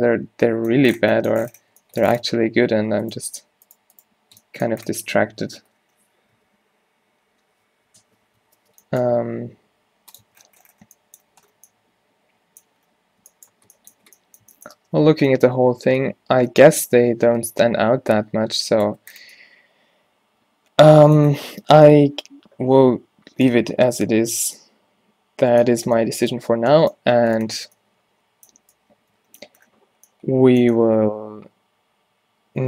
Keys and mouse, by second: 2.2 Tab, 5.5 -, 8.5 alt+o, 9.1 g, 10.4 Tab, 13.8 a, 14.1 a, 14.8 shift+space, 15.4 middle click, 16.3 middle click, 17.2 middle click, 19.4-20.7 middle drag, 20.9 middle click, 21.9-32.6 middle drag.